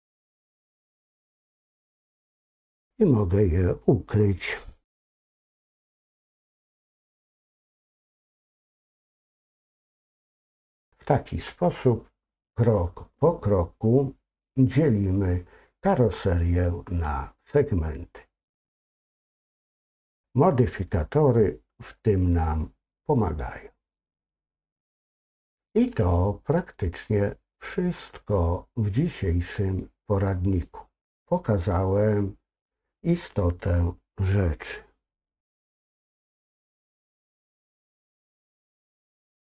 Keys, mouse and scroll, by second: 0.8-2.3 middle drag, 6.6-10.8 middle drag, 25.4 middle click, 27.0-28.4 middle drag, 28.4-29.8 scroll up 1, 29.8 middle click, 38.7 click.